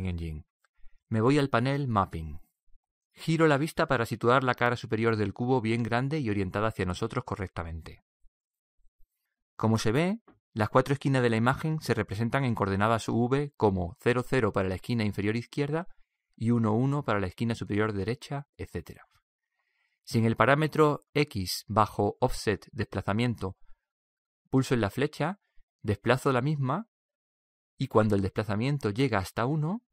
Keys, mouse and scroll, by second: 3.5-6.9 middle drag, 6.1-7.8 drag, 8.2-12.7 middle drag, 13.6-15.4 middle drag, 24.9-29.9 drag.